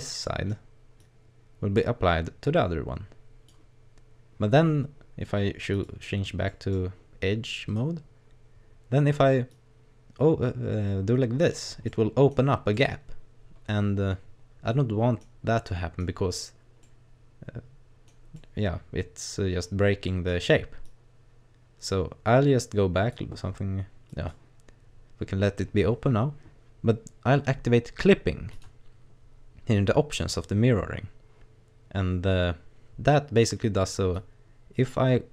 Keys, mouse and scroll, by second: 0.3 middle click, 1.0 click, 5.7 click, 6.5 middle click, 7.7 right click, 8.3 scroll up 2, 9.5 click, 11.9 middle click, 12.7 middle click, 15.7 middle click, 16.8 middle click, 18.4 middle click, 20.1 middle click, 20.8 click, 24.1 click, 28.5 click, 34.1 click.